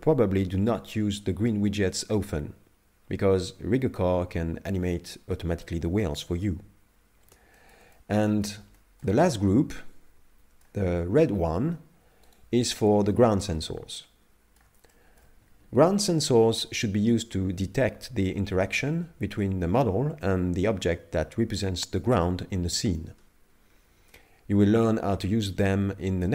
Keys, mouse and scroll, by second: 5.1 middle click, 7.0-7.5 scroll down 1, 7.5 shift+middle click, 7.9 middle click, 8.8 shift+middle click, 9.2 middle click, 12.3 right click, 12.9 middle click, 14.9 shift+middle click, 15.5 scroll up 2.